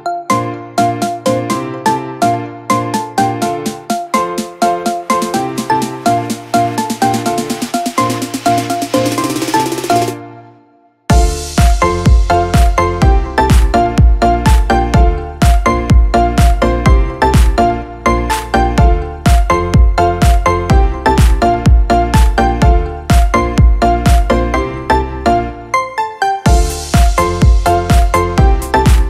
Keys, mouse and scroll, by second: 1.7 Caps_Lock, 2.0-5.6 typing.